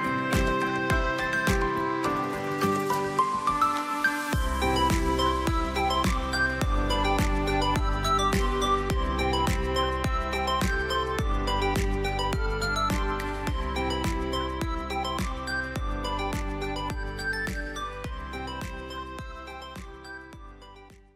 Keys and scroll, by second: 4.6 ctrl+g, 5.4 ctrl+z, 5.8 ctrl+shift+g, 6.5 ctrl+g, 7.0 space, 7.8 F2, 8.5 space, 12.1 space, 13.9 Delete, 14.4 space.